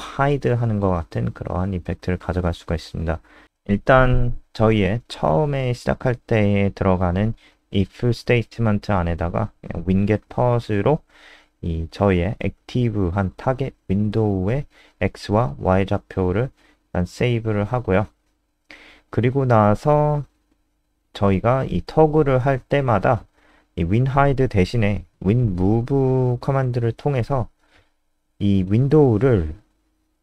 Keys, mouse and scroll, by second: 0.3 Return, 0.4-2.8 typing, 3.3 Left, 4.0 shift+End, 4.2-7.1 typing, 9.4 BackSpace, 10.4-11.6 typing, 13.1-13.8 typing, 13.9 Escape, 14.3 ctrl+s, 14.4 Down, 15.9 click, 17.2-18.3 scroll down 2, 18.9 click, 22.4 shift+Home, 25.0 BackSpace, 25.2 BackSpace, 25.9 ctrl+z, 26.4-30.2 typing.